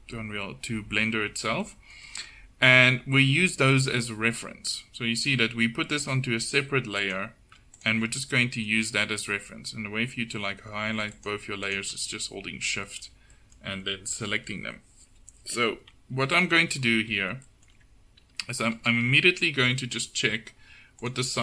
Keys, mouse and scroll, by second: 16.5 KP_7.